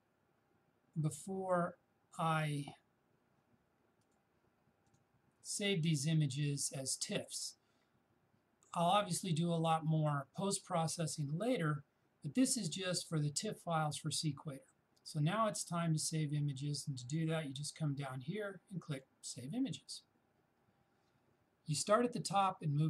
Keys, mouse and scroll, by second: 4.0 click, 18.9 click.